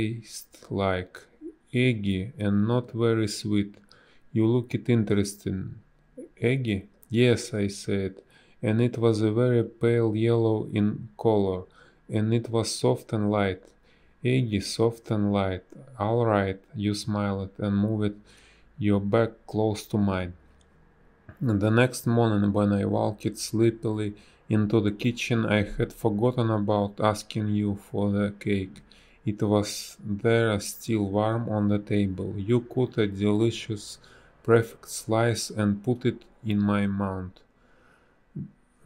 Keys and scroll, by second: 0.1 ctrl+z, 0.1 space, 4.1 ctrl+z, 6.8 space, 7.4 ctrl+z, 11.4 space, 16.0 space, 17.1 space, 22.8 space, 23.4 space, 25.9 space, 26.3 a, 29.5 space.